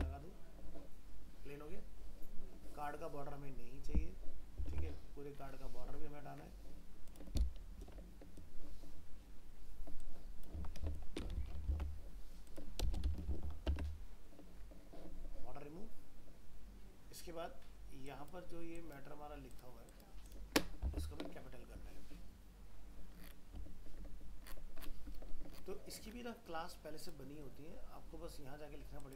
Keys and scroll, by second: 4.7 alt+Tab, 11.7 ctrl+c, 13.1 ctrl+v, 13.7 alt+Tab, 20.9 alt+Tab.